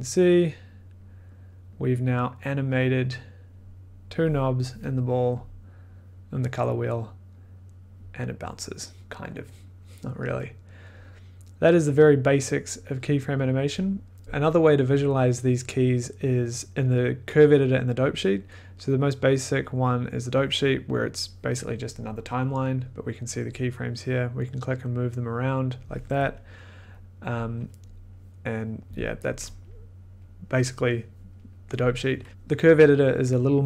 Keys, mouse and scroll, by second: 4.4-9.3 drag, 13.4 click, 19.6-22.9 drag, 23.3-24.6 drag, 26.0 click, 27.3 click, 28.8 middle click, 29.1 middle click, 29.9 middle click, 32.3 click.